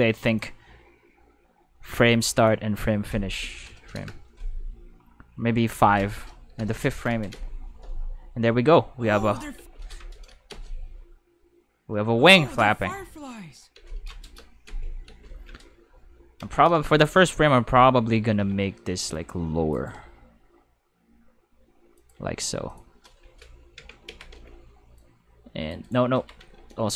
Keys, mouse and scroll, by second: 0.2 click, 2.4 click, 3.3 2, 3.7 BackSpace, 3.9 3, 4.0 Return, 5.7 click, 6.5 5, 7.3 space, 9.5 space, 10.5 space, 13.7 space, 14.7 space, 15.0 space, 17.2 Tab, 17.5 5, 18.4 c, 19.1-19.7 drag, 19.7 right click, 19.9 r, 22.0 click, 22.2 g, 22.7 click, 23.2 Tab, 24.0 alt+a, 24.3 c, 25.0-25.7 drag, 26.1-26.9 typing.